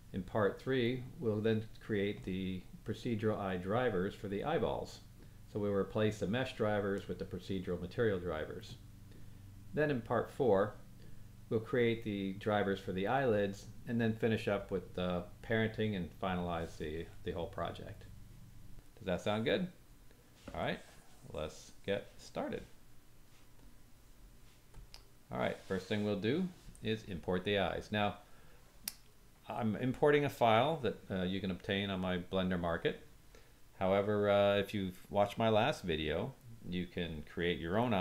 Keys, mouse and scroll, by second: 29.8-38.0 drag, 29.8-38.0 middle drag, 29.8-38.0 right drag.